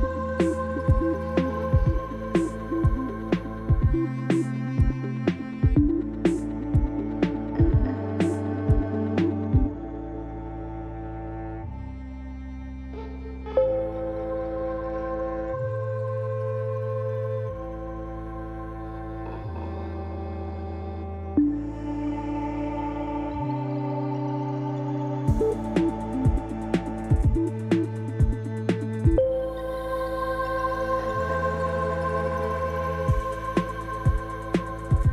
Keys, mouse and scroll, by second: 0.3 KP_1, 1.2 middle click, 1.9-3.4 alt+shift+middle drag, 5.5 g, 9.0-16.7 middle drag, 16.7-35.1 drag, 24.9 typing, 25.5 Tab, 29.7 p, 34.7 Tab.